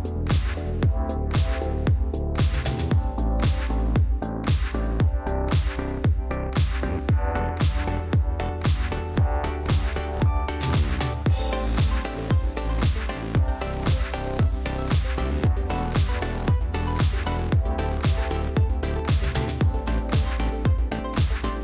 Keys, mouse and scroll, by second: 0.1 click, 4.3 click, 7.6 click, 9.6 click, 10.5 ctrl+d, 11.5 shift+click, 13.0 ctrl+z, 13.6 click, 15.1-15.9 drag, 15.9 ctrl+z, 17.2 shift+click, 20.3 click.